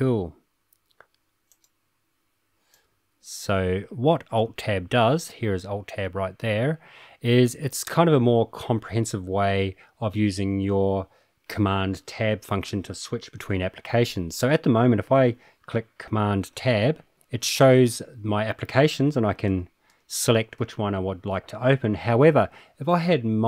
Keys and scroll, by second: 16.5 super+Tab, 19.4 super+Tab, 19.9 super+Tab.